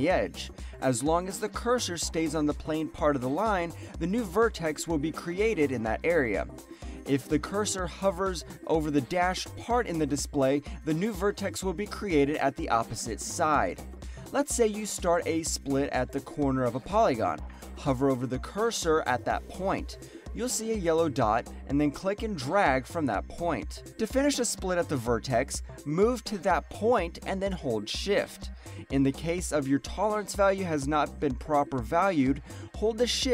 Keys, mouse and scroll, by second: 10.0 alt+right click, 10.7 click, 11.4 alt+right click, 11.6 alt+middle click, 32.5 alt+right click, 32.8 alt+click, 32.9 alt+right click.